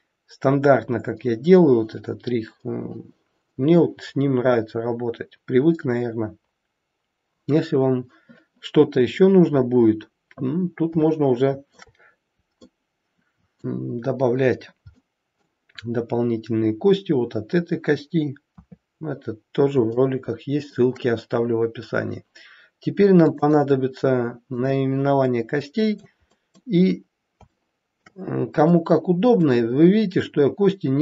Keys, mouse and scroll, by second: 11.1 shift+middle click, 12.6 middle click, 14.8 middle click, 18.5 KP_3, 19.3 scroll down 2, 20.0 shift+middle click, 23.2 click, 24.5 click, 25.3 middle click, 26.3 middle click, 26.8-27.5 scroll up 3, 27.5 shift+middle click, 28.2-29.2 scroll up 2, 28.7 middle click.